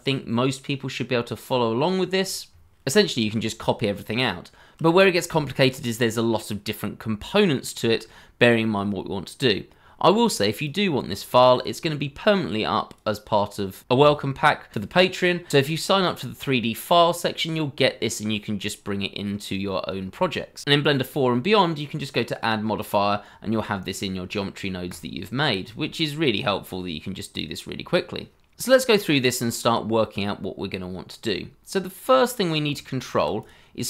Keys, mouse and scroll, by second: 0.0 a, 0.8 KP_Decimal, 32.7 shift+middle click.